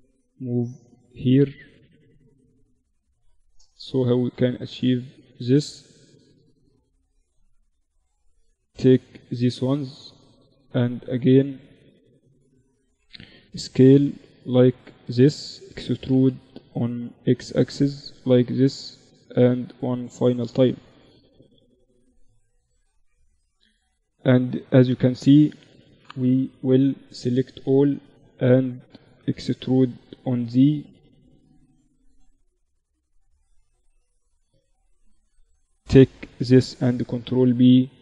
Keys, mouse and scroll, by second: 2.7 s, 5.2 Tab, 6.3 a, 6.5-8.9 right drag, 7.5-9.4 drag, 12.3 s, 14.1-15.3 drag, 15.3 e, 17.5 s, 20.6-22.6 drag, 22.7 a, 25.5 KP_1, 25.8 a, 26.7 a, 27.0 a, 28.9 e, 31.1 Tab, 32.2-34.2 drag, 33.1 Tab, 33.9 a, 34.3-36.3 right drag, 35.3 ctrl+b.